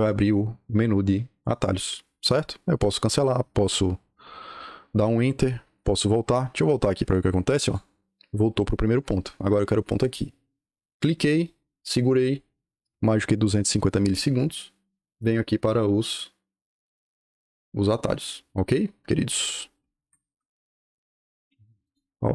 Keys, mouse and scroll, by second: 7.0 click, 10.7 click, 11.3 right click, 19.2 click, 19.9 Escape, 21.7 click.